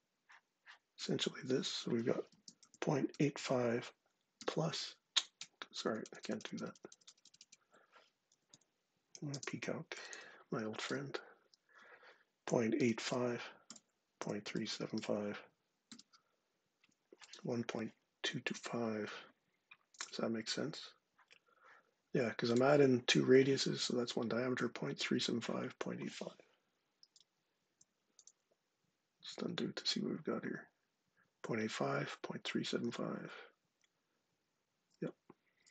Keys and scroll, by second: 2.1 super+space, 5.2-8.1 typing, 9.2 super+space, 9.5-10.3 typing, 10.7 Return, 12.1-12.9 typing, 13.5 Return, 14.0-15.3 typing, 27.0 super+Tab, 29.0 super+z, 32.6 super+Tab, 34.6 super+Tab.